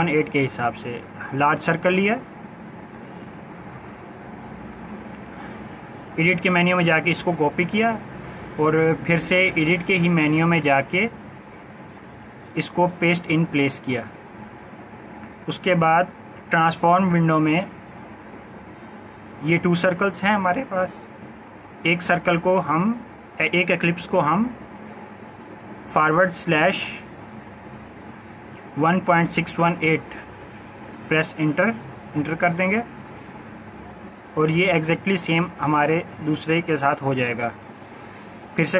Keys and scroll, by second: 19.2 ctrl+z, 27.3 typing, 28.5-29.5 typing, 31.3 Return.